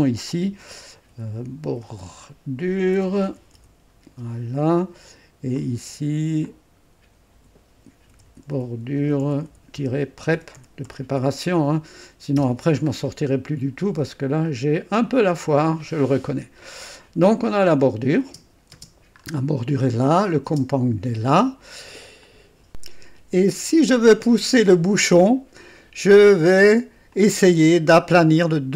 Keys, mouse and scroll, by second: 1.1-4.1 typing, 5.5 click, 6.4 click, 7.3 F2, 7.8-12.8 typing, 12.9 scroll up 1, 14.4 click, 14.6-15.4 typing, 17.8 click, 18.2 space, 18.7 space, 19.2 scroll up 1, 20.2 click, 20.5 space, 21.3 click, 22.2 click, 22.7 click, 25.0-25.3 scroll up 2, 25.5-26.1 scroll down 2, 26.1 right click, 27.1-28.5 drag.